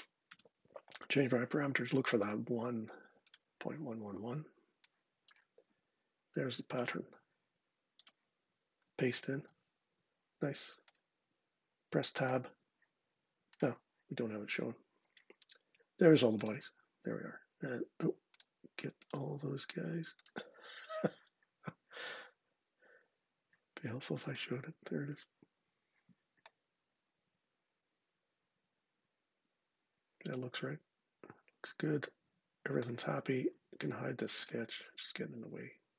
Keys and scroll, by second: 0.0 Return, 9.1 super+v, 12.2 Tab.